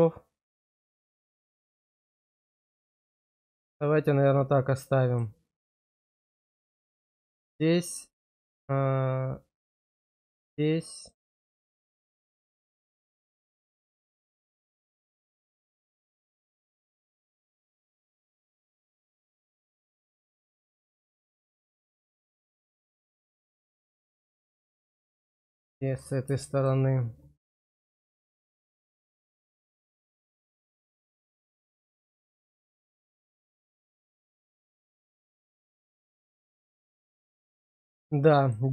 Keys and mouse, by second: 6.5 click, 6.9 middle click, 10.7 middle click, 11.9 shift+click, 13.2 shift+middle click, 13.8 middle click, 15.4 shift+click, 17.6 shift+click, 18.3 shift+click, 18.9 shift+click, 20.2 shift+click, 21.2-23.6 middle drag, 25.6 middle click, 26.5 shift+click, 30.1-31.4 middle drag, 31.8-35.0 middle drag, 35.4-36.7 middle drag, 36.9 shift+middle click, 37.5 middle click.